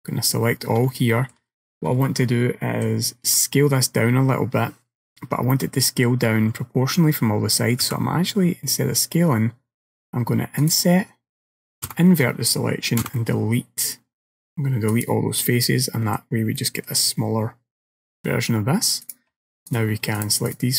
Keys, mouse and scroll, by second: 0.4-0.9 scroll up 2, 1.0 shift+middle click, 2.1 shift+middle click, 5.6 middle click, 7.9 i, 11.9 ctrl+i, 13.1 Delete, 15.7 middle click, 16.6 middle click, 19.1 click, 19.8 click, 20.2 shift+click, 20.5 click.